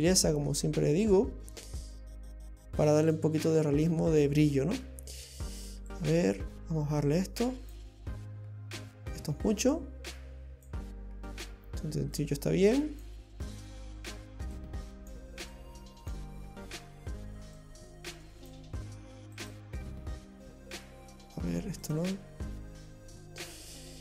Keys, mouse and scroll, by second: 1.8 click, 6.0 click, 9.7 click, 12.2 click, 14.6 click, 15.5 click, 17.6 click, 19.4 click, 21.8 click.